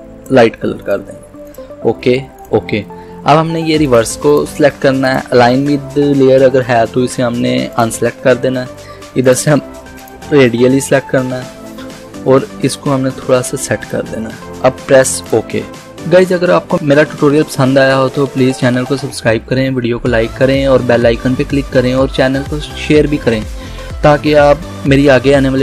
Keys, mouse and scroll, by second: 7.8 click, 12.8-15.3 drag.